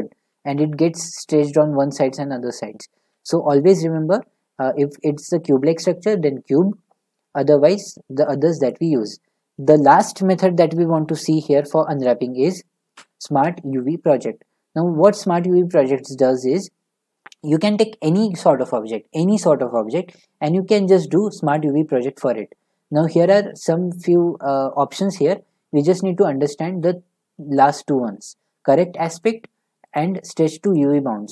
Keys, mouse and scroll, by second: 5.8-8.9 middle drag, 12.9 u, 21.5-24.6 drag, 29.2 click, 30.0 click.